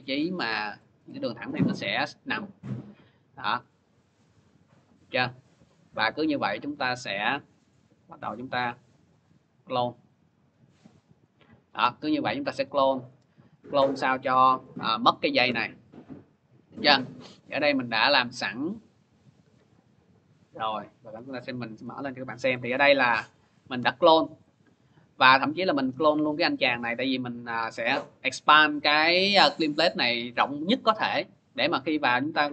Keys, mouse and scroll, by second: 0.2 click, 3.4 alt+click, 4.2 click, 6.1 alt+click, 7.0 click, 8.3 alt+click, 9.0 click, 10.0 alt+click, 11.0 click, 12.2-13.4 scroll, 12.2 click, 12.9-13.4 click, 14.1 ctrl+-, 15.3 ctrl+-, 17.1 click, 17.6 click, 19.2 click, 20.4 click, 20.6 click, 22.5 ctrl+=, 23.0 ctrl+=, 24.3 click, 25.7 click, 25.7 click, 25.9 click, 28.9-29.7 typing, 30.2-32.0 click, 32.0-32.5 drag.